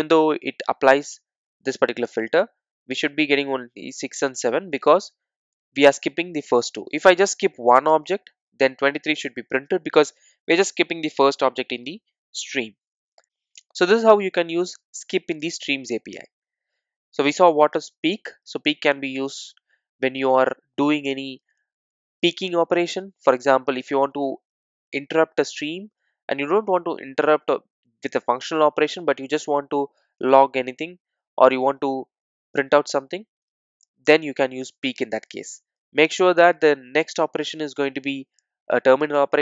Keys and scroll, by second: 9.3 super+r.